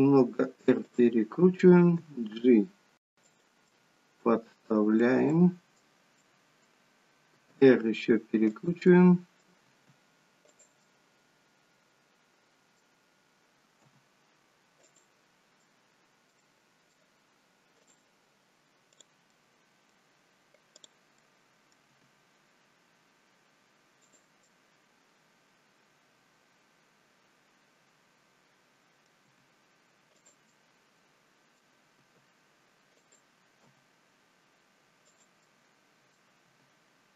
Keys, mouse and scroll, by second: 2.1 g, 3.6 middle click, 5.3 middle click, 7.2 r, 8.7 middle click, 9.6 r, 10.7 middle click, 13.9 g, 15.5 middle click, 16.3 middle click, 17.7 click, 18.8 click, 19.3 middle click, 20.7 click, 21.2 middle click, 21.9 g, 24.4 middle click, 29.2 g, 30.5 middle click, 32.0 r, 33.6 g, 35.4 middle click, 36.5 g.